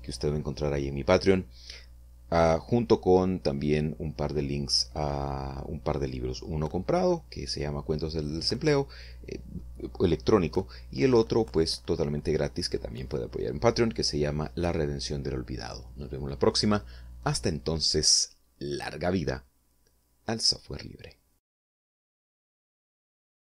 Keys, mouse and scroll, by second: 23.4 click.